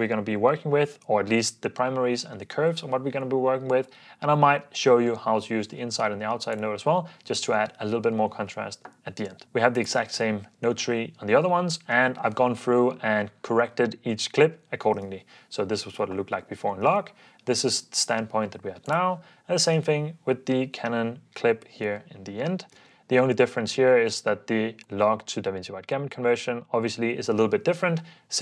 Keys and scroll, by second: 15.1 alt+d, 19.9 alt+d, 21.9 alt+d, 22.8 alt+d.